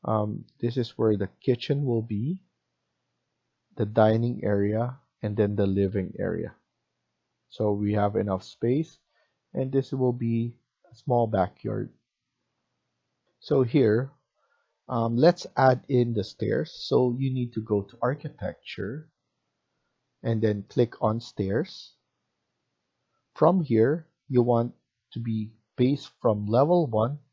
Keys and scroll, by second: 13.1 F1.